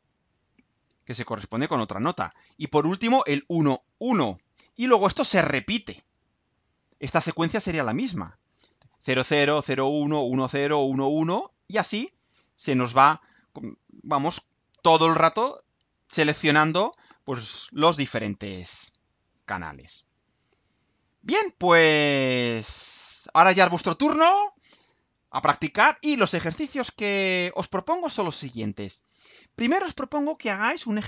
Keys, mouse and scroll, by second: 18.9-19.6 scroll down 2, 19.7-20.2 scroll down 2, 21.0-22.1 scroll down 6, 22.4 scroll up 2.